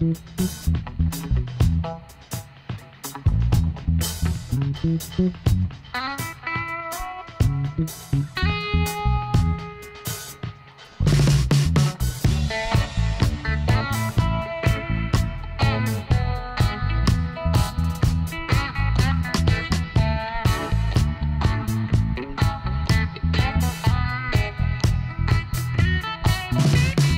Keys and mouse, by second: 0.8-2.1 middle drag, 3.4-5.1 middle drag, 4.6 Tab, 8.9-10.7 drag, 9.1 Tab, 10.7 middle click, 17.0-18.4 drag, 18.4 KP_Decimal, 21.6-23.9 middle drag, 23.9 click, 24.7 middle click, 25.6-26.6 right drag, 25.8 c.